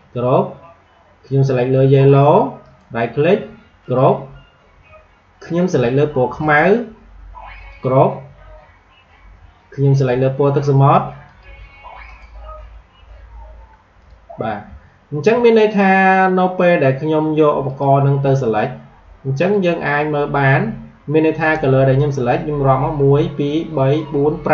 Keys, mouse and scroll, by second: 2.5 right click, 3.7 click, 6.3 right click, 7.6 click, 11.2 click, 12.0 right click, 13.9 click, 14.8-15.2 alt+scroll up 1, 17.6 click.